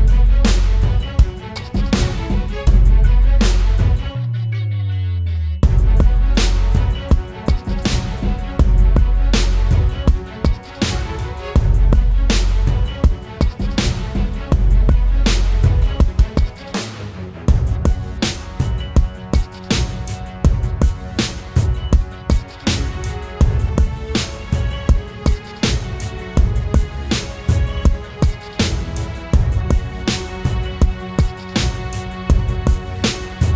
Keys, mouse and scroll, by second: 4.2 alt+shift+click, 14.6 Return, 26.2 shift+click, 27.8 shift+click, 28.9 shift+click, 30.3 shift+click.